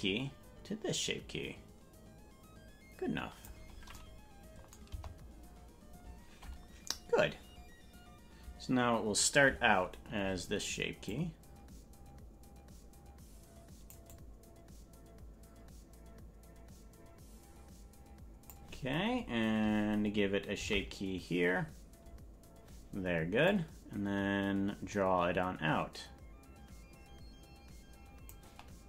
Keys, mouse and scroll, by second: 4.9 KP_0, 11.1-14.0 drag, 14.1-18.6 drag, 22.6 i, 23.5-28.4 drag.